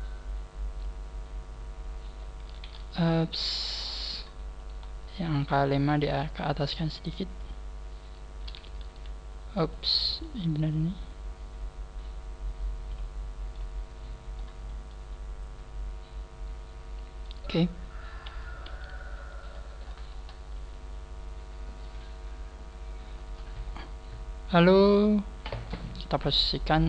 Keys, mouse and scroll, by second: 0.9 click, 3.8-4.3 scroll up 7, 4.6 right click, 5.1 shift+right click, 5.9 click, 9.7 ctrl+z, 9.7 right click, 10.1 shift+right click, 10.7 click, 10.7 click, 13.5 middle click, 14.6 scroll down 5, 14.9 middle click, 17.7 scroll down 1, 18.7 KP_3, 19.5-20.5 scroll down 16, 25.6-26.1 scroll up 2, 26.1 right click, 26.6 click, 26.7 click.